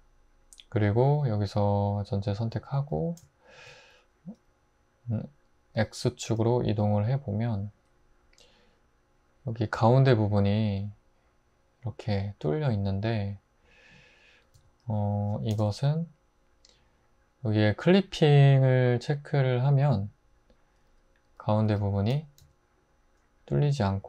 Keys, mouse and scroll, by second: 2.5 a, 5.8 g, 6.7 x, 14.5-16.9 drag, 15.5 super+z, 21.7 g, 22.4 x.